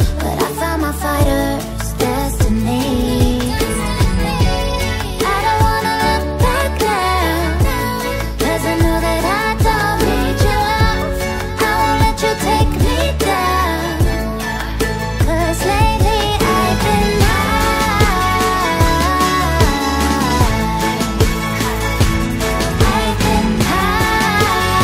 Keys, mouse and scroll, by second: 1.0-2.7 scroll down 1, 3.3-5.4 scroll down 1, 6.8-10.4 scroll down 1, 12.3-15.5 scroll down 1.